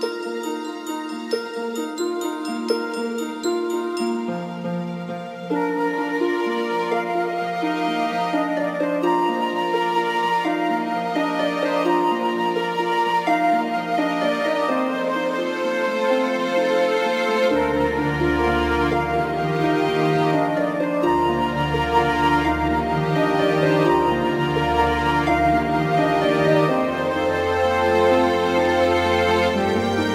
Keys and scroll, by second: 6.8 ctrl+z, 8.8 ctrl+z, 10.7 ctrl+z, 11.2 ctrl+z.